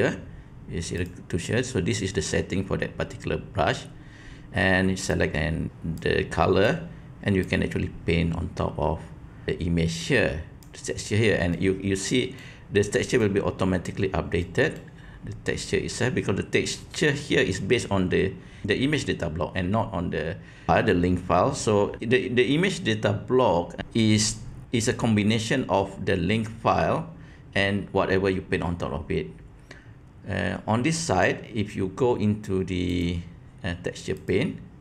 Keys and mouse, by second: 0.9 click, 5.1 click, 6.0 click, 7.4-10.6 drag, 11.6-12.3 middle drag, 12.9 middle click, 14.5 middle click, 33.0-34.3 drag.